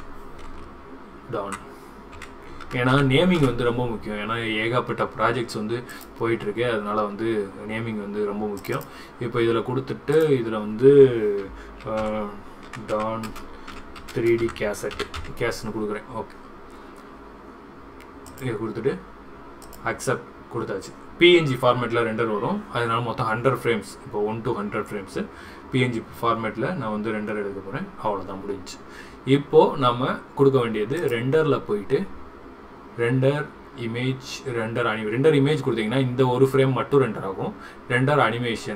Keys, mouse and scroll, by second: 31.1-38.7 drag.